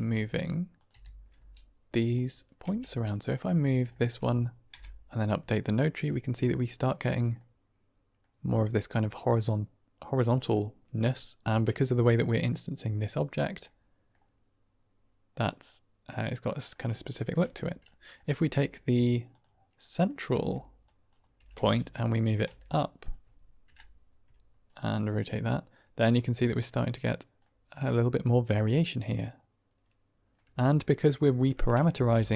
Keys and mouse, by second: 0.7 click, 0.8 r, 1.2 z, 2.0 click, 2.6 Tab, 2.8-3.2 middle drag, 3.8 shift+middle drag, 5.1 Right, 6.1-6.4 middle drag, 7.3-8.1 middle drag, 9.0 middle click, 10.6-11.0 middle drag, 12.0-12.4 middle drag, 13.5-14.1 middle drag, 15.3-16.4 middle drag, 16.6 shift+middle drag, 17.0 middle drag, 17.4 Tab, 17.9 middle click, 18.3 Tab, 19.2 click, 20.2 Tab, 20.8 click, 21.3 g, 21.5 z, 22.1 click, 22.4 Tab, 22.7 drag, 23.9 Right, 24.6 click, 24.7-26.4 middle drag, 27.4-30.2 middle drag, 30.3 Tab, 31.8 ctrl+space.